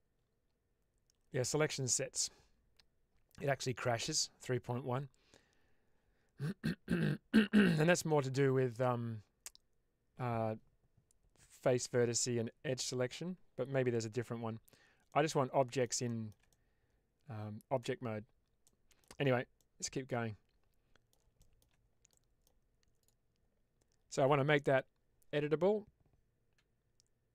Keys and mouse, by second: 14.1 Tab, 15.0-15.7 middle drag, 16.0 middle drag, 16.4-17.7 middle drag, 18.5-18.9 middle drag, 19.4-20.9 middle drag, 20.9 click, 21.2-21.6 shift+middle drag, 22.0-22.3 middle drag, 22.9 click.